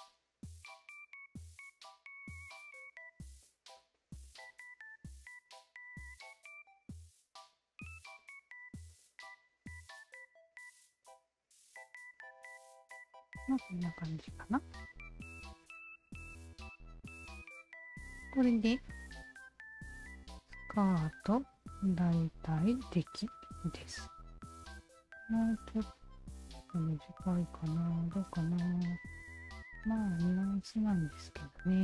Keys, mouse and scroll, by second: 0.6 shift+z, 1.2 shift+z, 1.9 shift+z, 2.2 click, 3.2 Tab, 3.4 click, 3.8-7.2 alt+drag, 7.7-8.8 alt+drag, 9.4 alt+click, 9.9-13.1 alt+drag, 13.3 alt+drag, 13.5-17.0 drag, 18.3 alt+click, 18.9-23.9 alt+drag, 24.6 alt+drag, 25.1-28.5 alt+drag, 29.2 alt+click, 29.4 Tab, 29.9 alt+right click, 30.5 alt+middle click, 30.9 alt+right click, 31.6 click.